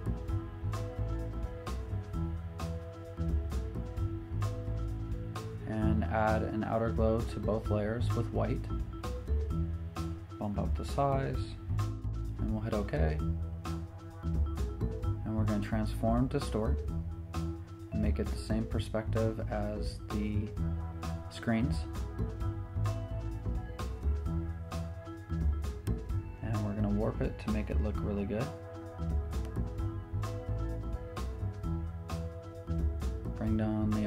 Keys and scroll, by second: 15.6 super+t, 24.8 v, 27.6 super+t, 31.1 Return, 33.9 v.